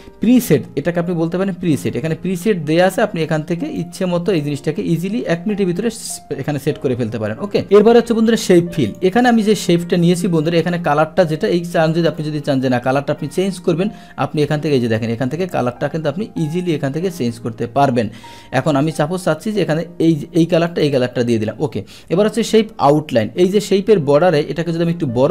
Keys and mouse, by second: 1.7 click, 3.8 click, 8.9 click, 9.6 click, 12.1 click, 20.7 click, 23.1 click.